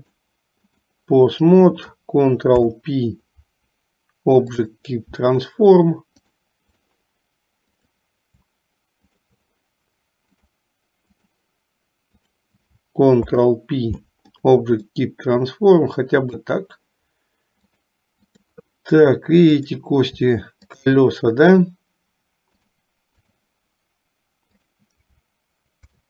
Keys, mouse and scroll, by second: 0.1 click, 2.5 ctrl+p, 6.4 click, 7.9 click, 9.1 shift+click, 10.5 click, 12.2 click, 13.4 ctrl+p, 15.2-16.6 middle drag, 17.8 click, 20.7 shift+click, 22.7 click, 24.8 click, 25.9 ctrl+p.